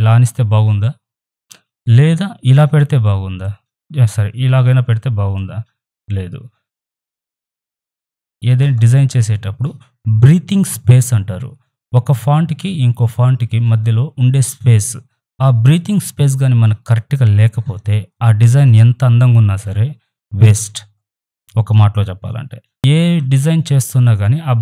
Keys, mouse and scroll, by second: 22.7 Up.